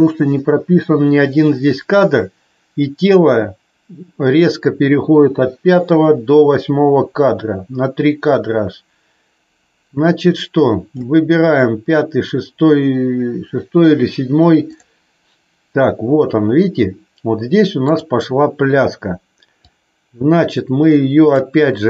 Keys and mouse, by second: 14.6 click, 19.7-21.4 drag.